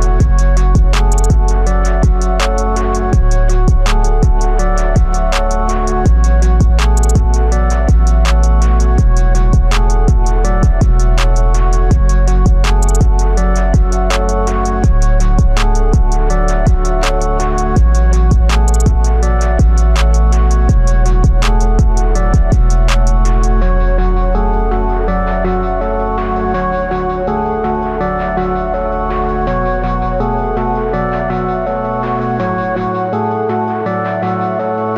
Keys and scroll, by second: 24.0 ctrl+alt+z, 27.5 ctrl+alt+z.